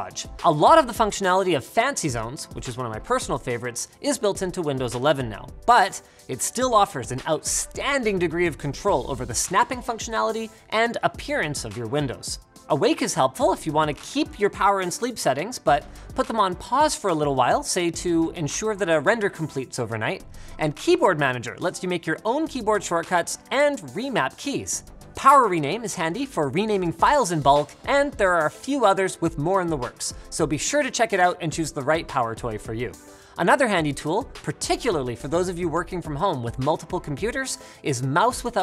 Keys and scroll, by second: 27.3-28.5 typing, 30.6-32.3 typing.